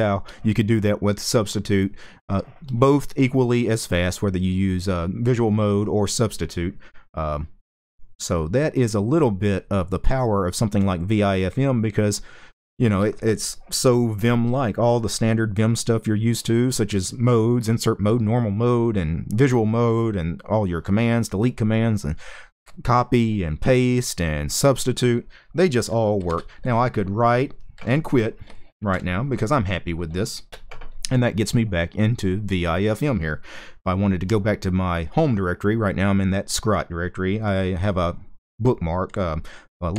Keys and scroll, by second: 25.9 typing, 27.2-28.6 typing, 30.2 Return.